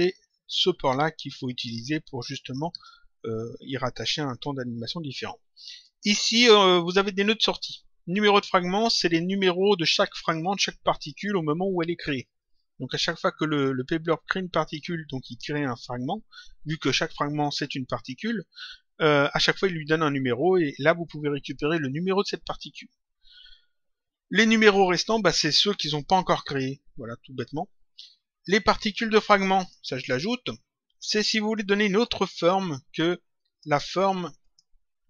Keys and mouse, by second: 2.6 click, 4.2 click, 6.7 click, 29.5 click, 30.8 click, 33.0 click, 34.3 click.